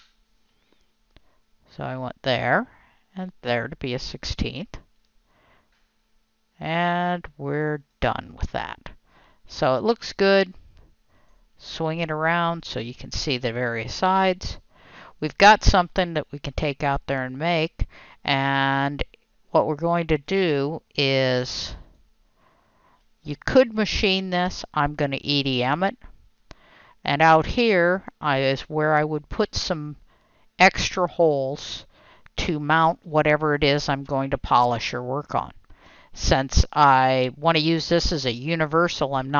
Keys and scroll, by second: 0.0 Delete.